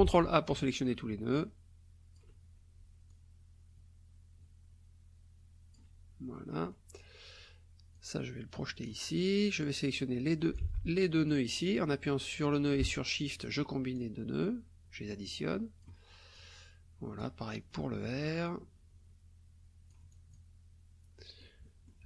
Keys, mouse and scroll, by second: 0.0 ctrl+a, 1.4 alt+click, 3.1-5.9 alt+drag, 6.3 click, 7.9 click, 9.9 click, 10.7 ctrl+z, 11.3 click, 13.3 shift+click, 13.9-16.0 shift+drag, 16.3-17.4 drag, 18.4-20.5 drag, 21.2 click.